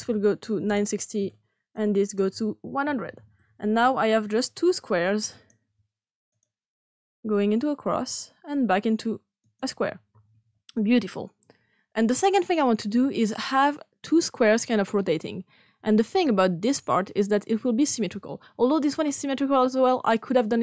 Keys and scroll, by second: 0.6 Return, 2.3-3.4 typing.